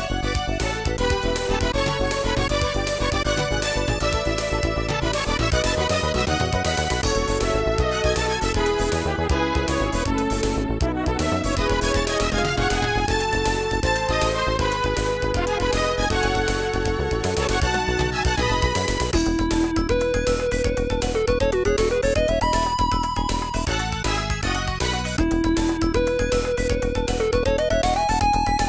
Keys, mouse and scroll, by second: 0.8 ctrl+s, 1.0 click, 2.5 r, 2.8 click, 3.0 g, 4.0 click, 4.1 click, 4.5 KP_0, 6.0 n, 7.0 middle click, 8.9 ctrl+s, 9.1 click, 9.5 scroll down 1, 10.1 scroll up 1, 11.5 g, 13.6 click, 13.8 click, 18.7 space, 21.6 ctrl+a, 25.1 shift+a.